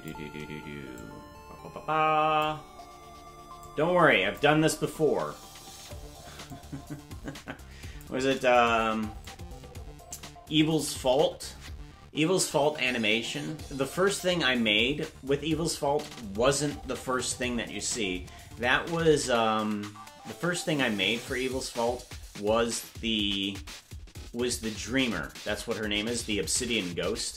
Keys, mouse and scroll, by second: 0.9-2.5 shift+drag, 3.6 click, 6.5-8.1 drag, 9.2-10.8 shift+drag.